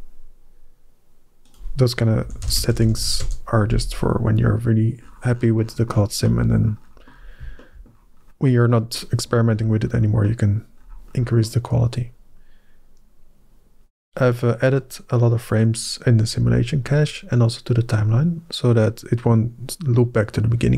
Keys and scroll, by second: 2.1-2.8 typing, 3.0 Return.